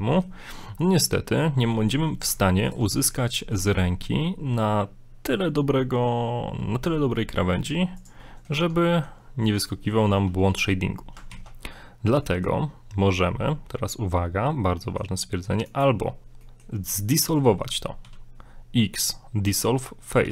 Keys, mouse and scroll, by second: 0.1 middle click, 0.8 middle click, 2.0 middle click, 2.7 ctrl+right click, 2.9 ctrl+right click, 3.1 middle click, 3.3 scroll up 1, 3.5 g, 8.2 middle click, 8.6 Tab, 8.8 middle click, 9.5 middle click, 11.3 ctrl+z, 12.2 middle click, 13.4-13.9 scroll down 1, 14.9 middle click, 16.4 middle click, 17.5 scroll up 1.